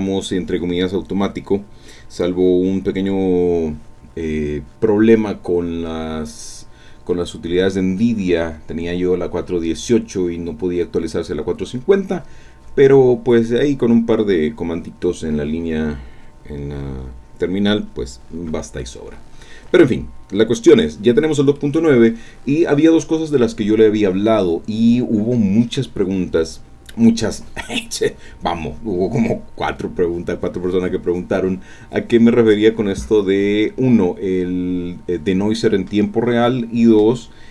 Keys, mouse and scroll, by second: 18.8-20.0 drag, 20.5 scroll up 2, 21.6-23.2 drag.